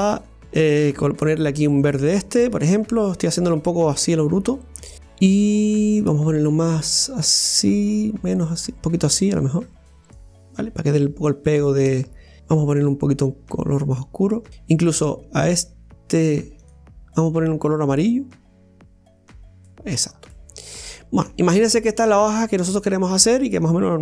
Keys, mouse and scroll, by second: 1.8 click, 4.0 click, 4.9 scroll up 1, 6.1-9.1 drag, 10.8 scroll down 1, 11.5-12.4 middle drag, 12.4-14.0 drag, 14.5 click, 18.1 click, 20.2 scroll up 1, 20.3-24.0 middle drag.